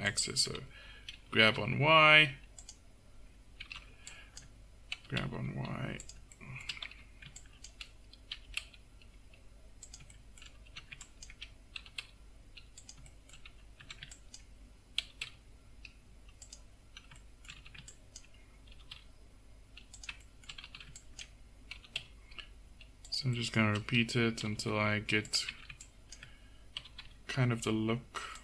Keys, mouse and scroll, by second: 0.1-1.4 drag, 1.4 g, 1.9 middle click, 3.6 a, 4.1 click, 5.0 g, 6.0 click, 6.9 a, 7.5-10.2 drag, 8.4 g, 10.7 a, 11.1 click, 11.9 g, 13.9 a, 15.1 g, 17.2 click, 17.7 a, 18.0 click, 18.8 g, 20.7 a, 21.8 g, 24.5 g, 25.6 a, 26.8 g.